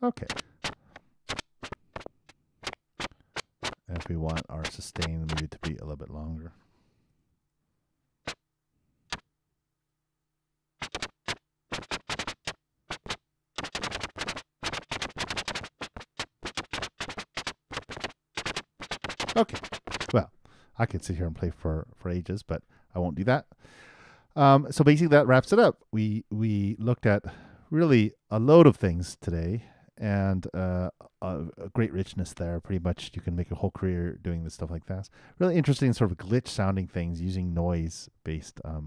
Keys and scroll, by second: 7.2 super+3, 7.4 super+Return, 20.0 super+..